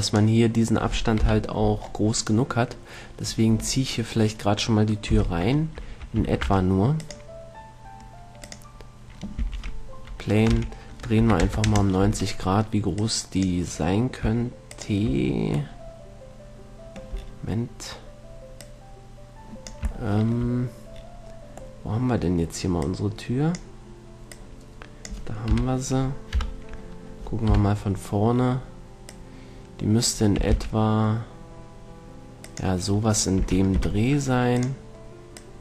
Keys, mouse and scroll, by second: 1.5 KP_1, 5.4 z, 6.5 shift+a, 9.7 r, 13.3-16.1 drag, 16.2 click, 18.7-20.7 drag, 23.1-26.6 drag, 25.7 KP_3, 26.6 KP_1, 27.7 KP_Decimal, 29.4-31.1 drag, 30.7 s, 32.9-35.6 drag, 33.7 s.